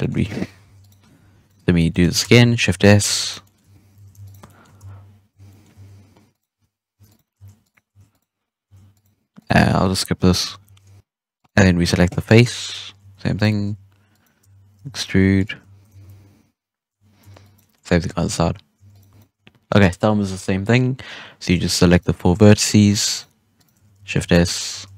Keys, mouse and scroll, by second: 0.2 shift+s, 0.6 Tab, 0.7 right click, 1.1 Tab, 1.3 right click, 1.7-2.2 middle drag, 2.2 shift+s, 2.8 middle drag, 3.0 Tab, 3.2 right click, 3.4 middle drag, 3.6 Tab, 3.7 scroll up 1, 3.9 alt+a, 4.2 alt+shift+right drag, 4.4-4.7 middle drag, 4.7 shift+s, 5.4 middle drag, 5.7 Tab, 6.2 right click, 6.5 Tab, 6.9 Tab, 7.0 right click, 7.3 Tab, 7.6 right click, 7.8 Tab, 8.0 right click, 8.6 Tab, 8.9 right click, 9.3 right click, 10.6 shift+d, 11.0 middle click, 11.3 right click, 11.5 middle click, 12.5 shift+s, 12.9 Tab, 13.3 right click, 13.6 Tab, 14.0 right click, 14.7 shift+e, 15.9 shift+s, 17.1 Tab, 17.3 right click, 17.7-18.0 middle drag, 18.0 Tab, 18.7 Tab, 18.8 right click, 21.3 right click, 21.8 shift+right click, 22.5-23.0 middle drag, 23.0 shift+right click, 23.5 shift+right click, 23.9 shift+s, 24.3 Tab, 24.7 z.